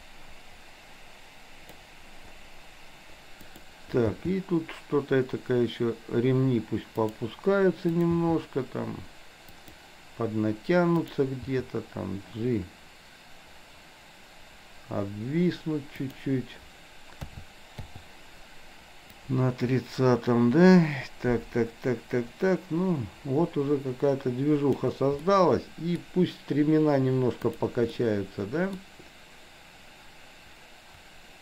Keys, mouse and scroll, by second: 3.5 click, 4.1 g, 8.0 click, 8.2 g, 10.9 click, 11.5 g, 17.2 a, 17.9 i, 19.2-25.0 drag, 25.2-26.1 middle drag, 27.6 drag, 28.0-28.9 middle drag.